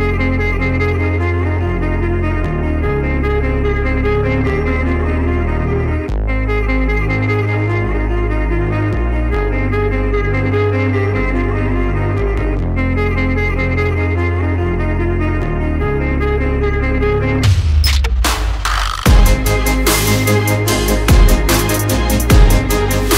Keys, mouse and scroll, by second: 0.5 click, 7.4 click, 8.1 right click, 8.7 click, 18.0 click, 21.3 click.